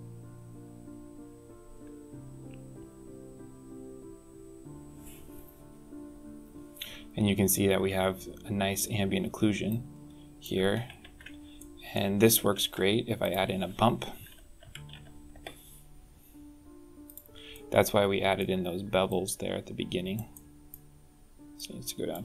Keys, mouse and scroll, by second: 9.5 click, 10.8 ctrl+t, 11.4 middle click, 12.3 shift+a, 17.3 middle click, 18.9 click, 20.1 middle click, 21.4 click.